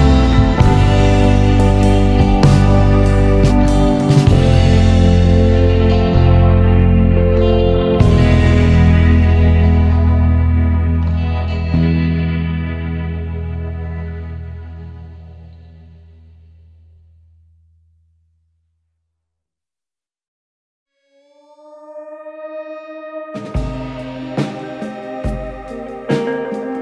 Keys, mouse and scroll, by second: 4.4 alt+click, 6.9 click, 9.0 click, 10.3 e, 13.6 Tab, 14.5 click, 18.6 Tab, 19.2 Tab, 20.4 scroll up 2, 21.7 click, 23.2 click, 24.6 ctrl+b.